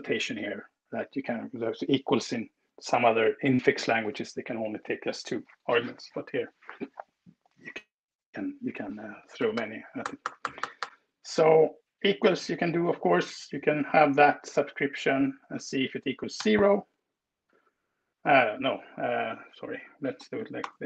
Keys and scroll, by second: 8.4 BackSpace, 13.5 super+v, 15.4 space, 15.9 o, 20.4 Return.